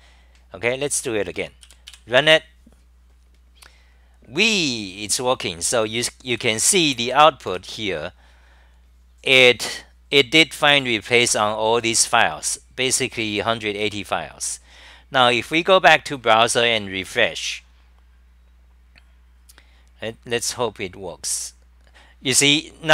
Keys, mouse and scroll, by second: 6.3 w, 7.6 3, 9.1-13.0 scroll up 72.